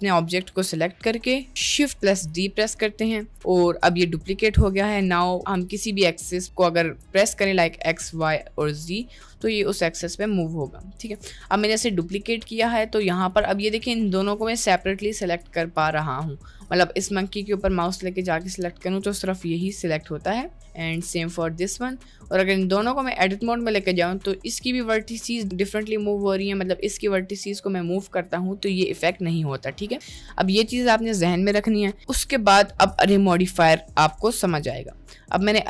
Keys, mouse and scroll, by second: 2.0 shift+d, 11.6-12.2 middle drag, 12.6 drag, 13.2 click, 13.9-14.4 drag, 15.0 click, 15.8 click, 16.5-16.9 middle drag, 17.5 click, 18.6 middle click, 19.7 g, 20.6 middle click, 21.0 click, 21.4 middle click, 22.2 click, 22.8 Tab, 23.2 middle click, 23.7 click, 24.0 g, 25.6 g, 27.0 g, 29.0 Tab, 29.8 click, 30.1 Delete, 32.2-35.1 drag, 35.3 middle click.